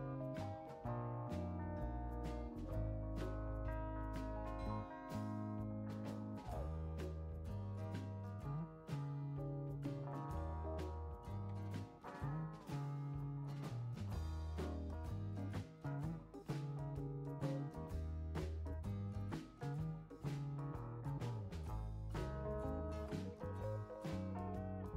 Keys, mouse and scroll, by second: 3.0 click, 4.1 click, 5.0 click, 8.7 click, 9.7 3, 10.3 0, 10.4 0, 11.2 Return, 11.5 scroll down 2, 13.2 click, 16.1 click, 17.2 5, 17.6 0, 18.1 Return, 22.8 click, 23.7-24.1 scroll down 3, 23.9 middle click.